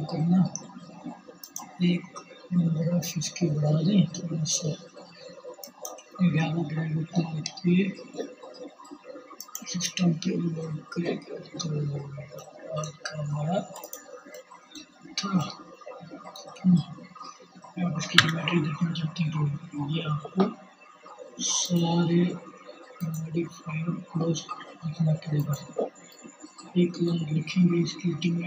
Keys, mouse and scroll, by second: 12.4-21.4 drag, 21.5-23.8 drag, 23.9-28.4 drag, 28.0 1.